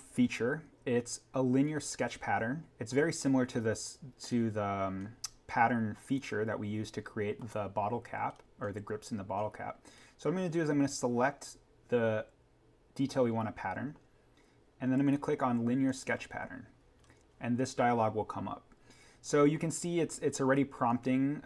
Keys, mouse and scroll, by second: 4.2-4.8 scroll up 1, 6.0 click, 8.2-8.9 scroll up 1, 15.8 click, 17.0-18.7 scroll up 1, 19.8-20.3 scroll down 1.